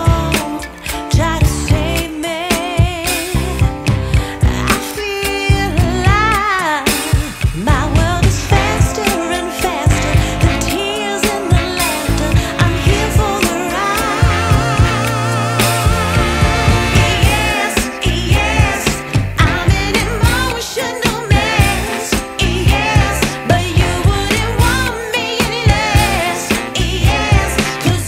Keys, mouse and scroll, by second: 2.1 click, 4.1 click, 10.9 click, 18.6 ctrl+shift+b, 22.9-23.3 ctrl+shift+b.